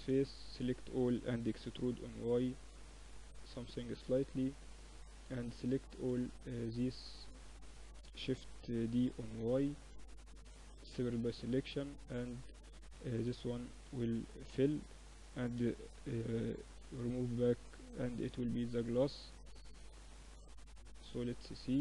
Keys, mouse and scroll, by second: 0.6 e, 2.6-3.8 middle drag, 4.9-6.9 drag, 5.2 a, 5.8-8.2 right drag, 7.6 click, 8.2 shift+d, 9.9 p, 10.7 Tab, 11.2-13.1 drag, 12.0 Tab, 12.3 a, 12.5 a, 12.9 a, 13.2 f, 13.6 Tab, 14.9 ctrl+alt+shift+c, 16.4 click, 17.9 click, 18.2-21.8 middle drag.